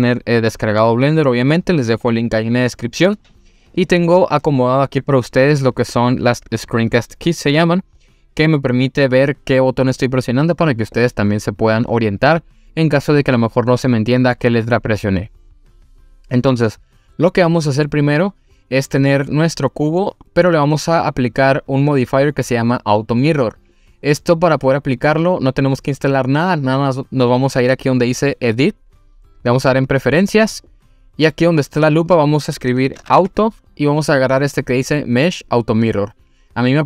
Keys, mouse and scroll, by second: 5.8 click, 19.3-20.0 middle drag, 20.3-20.7 scroll up 1, 28.5-30.1 drag.